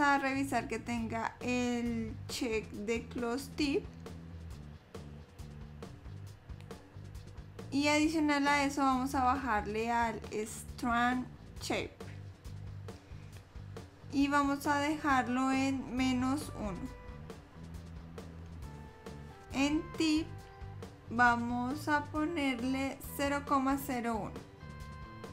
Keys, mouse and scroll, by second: 0.2-0.8 scroll down 3, 8.8 click, 13.7 click, 20.4 click.